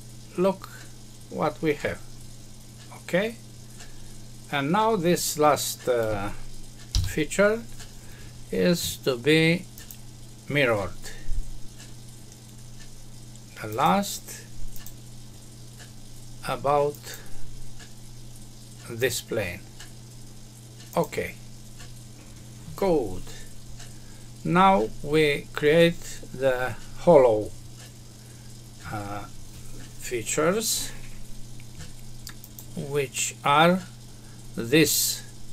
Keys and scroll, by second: 6.9 F6.